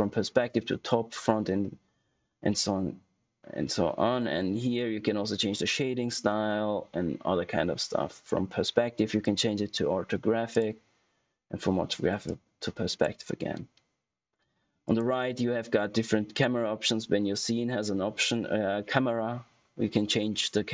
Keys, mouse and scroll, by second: 9.1 click, 11.6 typing.